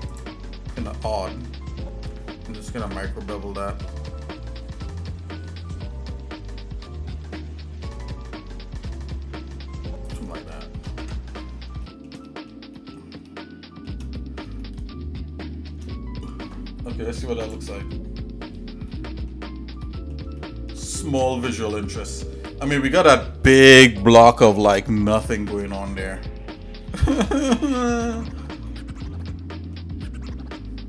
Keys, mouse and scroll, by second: 0.1 alt+shift+click, 2.6 ctrl+b, 10.5 shift+middle click, 11.0 Tab, 11.4 scroll down 1, 11.4-11.7 scroll down 1, 11.8 shift+middle click, 12.3 middle click, 12.8 middle click, 13.3 shift+middle click, 14.2 middle click, 14.6-15.7 shift+middle drag, 17.8 click, 18.9 middle click, 19.3-19.6 scroll down 2, 19.8 middle click, 20.4 shift+middle click, 21.0 middle click, 28.7 middle click, 29.2 shift+middle click, 30.0-30.8 shift+middle drag.